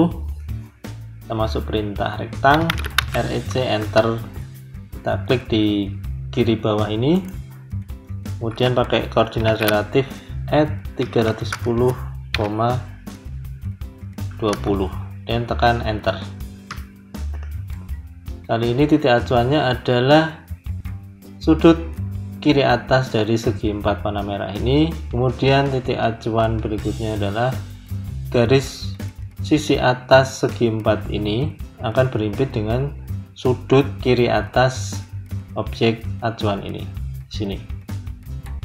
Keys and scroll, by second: 2.5 r, 3.7 Return, 8.3 Return, 9.3 shift+2, 10.9 3, 16.6 Return.